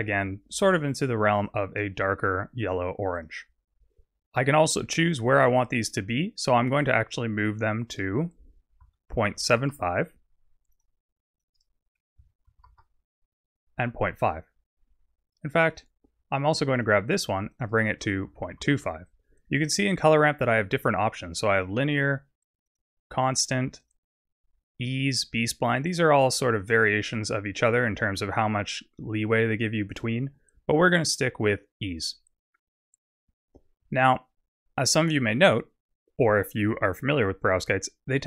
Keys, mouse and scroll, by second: 5.2 click, 7.8 click, 10.7 click, 11.3 click, 16.9 click, 18.8 click, 21.5 click, 23.8 click, 29.9 click, 32.9 scroll down 6.